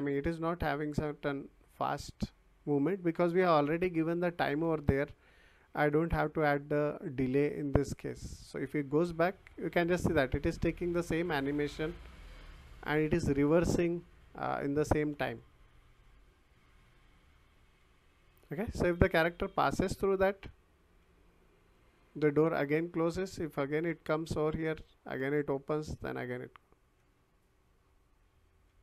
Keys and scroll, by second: 3.5 w, 4.6 d, 5.6 w, 8.3 s, 9.9 w, 12.3 s, 13.9 w, 16.4 s, 18.2 w, 23.0 s, 27.1 w.